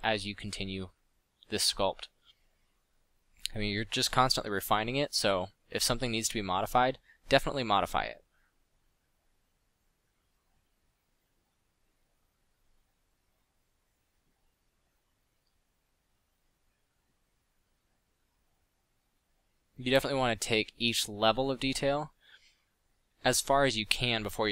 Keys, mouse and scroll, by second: 1.8 f, 5.4 f, 9.0-11.0 drag, 12.5 drag, 12.9-13.6 drag, 15.5-17.4 middle drag, 18.0-19.5 middle drag, 22.7-24.3 middle drag.